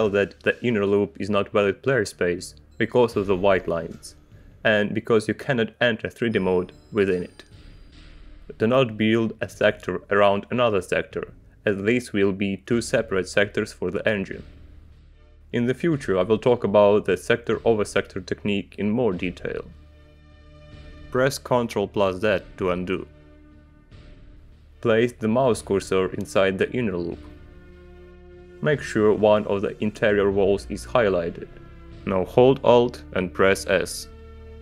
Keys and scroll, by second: 3.3 g, 11.9 space, 23.5 ctrl+z, 34.3 alt+s.